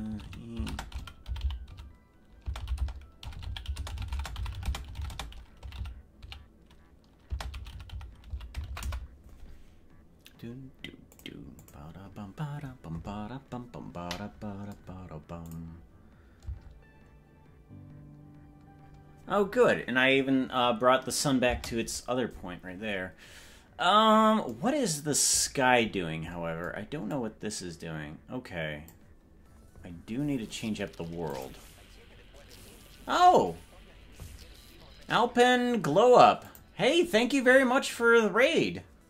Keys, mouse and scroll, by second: 15.5 click, 15.9-16.4 scroll up 8, 16.6 space, 21.8 space, 27.2-29.1 drag, 31.3 click.